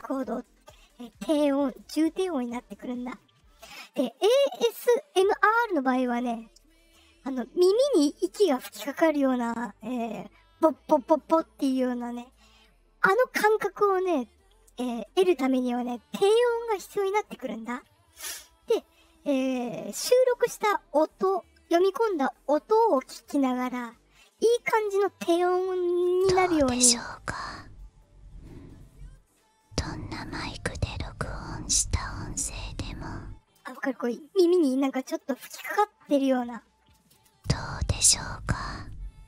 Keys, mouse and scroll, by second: 23.6-32.3 drag, 26.0 space, 33.5 space, 37.1-39.2 drag, 37.2 space.